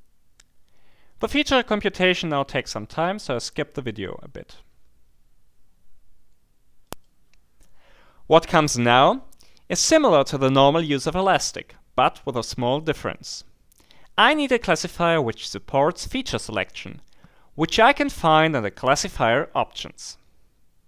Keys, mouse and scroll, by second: 6.9 click.